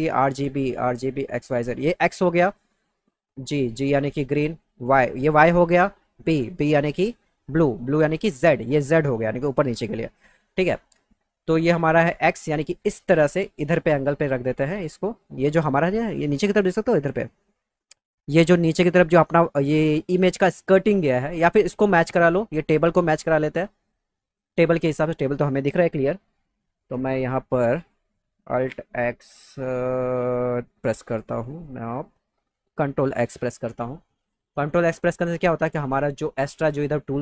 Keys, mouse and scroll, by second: 14.5-15.6 drag, 23.5 click, 27.7 alt+click, 30.7 alt+x, 33.0 ctrl+x.